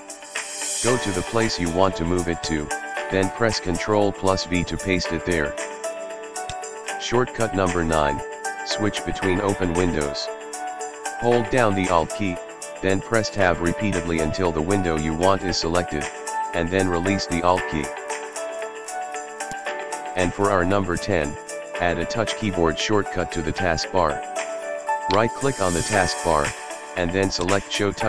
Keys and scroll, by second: 3.9 super+v, 13.2 alt+Tab.